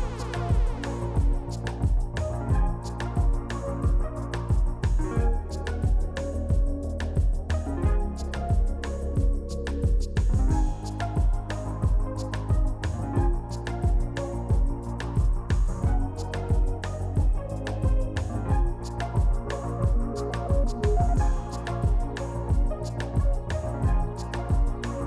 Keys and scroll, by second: 0.2 shift+r, 0.5 shift+r, 5.1 r, 8.7 s, 10.0 s, 10.5 s, 13.0 s, 13.8 s, 16.2 s, 18.5 ctrl+z, 19.2 shift+r, 21.5 ctrl+z, 23.2 s.